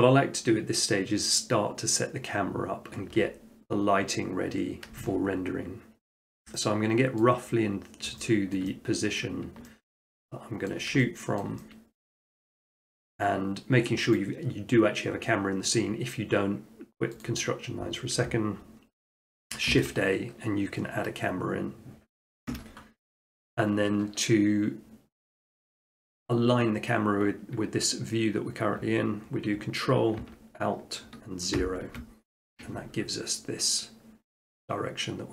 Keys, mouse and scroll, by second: 7.2 middle click, 7.6-8.2 scroll, 7.7 middle click, 8.2 middle click, 8.6 shift+middle click, 9.2 middle click, 10.7 ctrl+middle click, 11.4 shift+middle click, 12.2 shift+middle click, 12.7-13.7 middle drag, 14.2-15.2 drag, 17.2-18.3 drag, 19.4 click, 19.7 a, 19.9-20.5 drag, 22.5 Escape, 31.6 ctrl+alt+0.